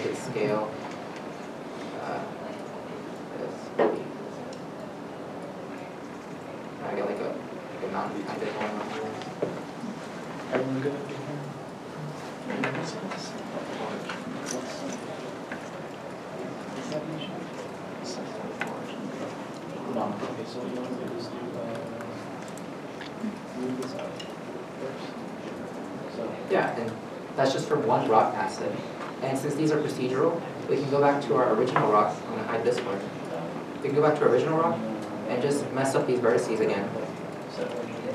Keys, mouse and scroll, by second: 0.8 w, 1.9 w, 6.1 r, 6.5 w, 9.1 w, 9.2 ctrl+c, 12.4 e, 23.5 w, 23.5 right click, 24.4 s, 25.4 w, 25.4 w, 26.2 s, 26.2 s, 29.5 alt+Tab, 35.1 alt+Tab, 35.5 scroll, 36.4-36.8 scroll down 1, 36.8 1, 36.8 g.